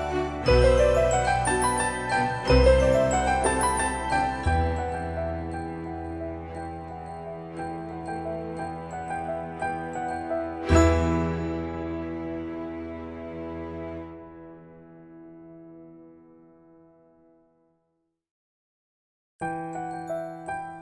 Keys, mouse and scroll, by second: 0.0 space, 1.1 scroll up 1, 2.6 click, 3.4-3.7 scroll down 1, 4.8-9.6 shift+middle drag, 9.9 scroll down 1, 10.7 scroll up 1, 11.7 Escape, 12.4 typing, 13.3 click, 16.2-16.7 typing, 17.2 Return, 19.0-20.8 shift+middle drag.